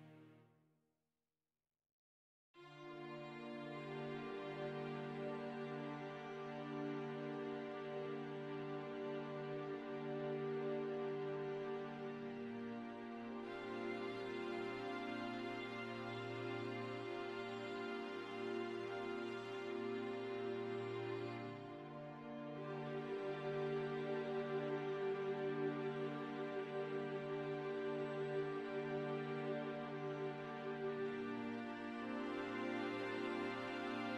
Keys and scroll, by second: 26.0 ctrl+d, 27.3 ctrl+space.